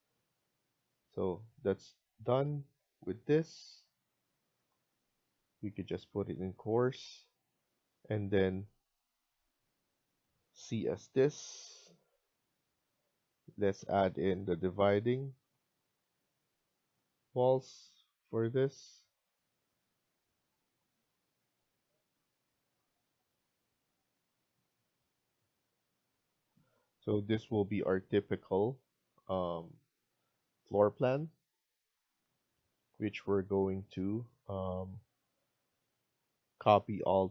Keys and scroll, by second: 1.4 Escape, 6.1 Escape, 8.7 Escape, 11.2 typing, 13.8 typing, 15.8 Escape, 19.8 Escape, 23.0 Escape, 26.1 Escape, 26.4 Escape.